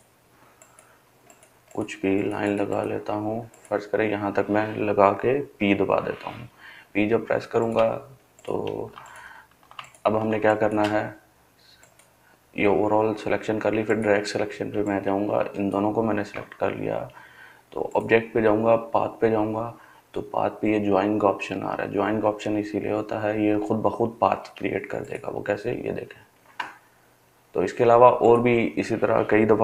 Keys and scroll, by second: 5.3 p, 8.6 |.